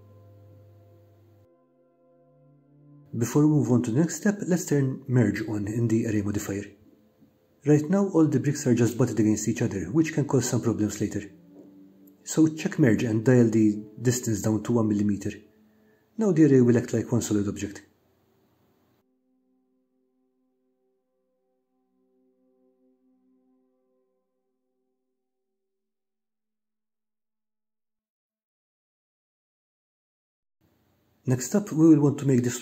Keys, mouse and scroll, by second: 0.4 middle click, 1.4-3.7 middle drag, 3.7 scroll down 1, 6.7-7.7 middle drag, 7.7 scroll down 1, 16.2-24.0 drag, 21.5 BackSpace, 25.6 scroll up 1, 25.7-29.6 middle drag, 30.6-32.6 middle drag.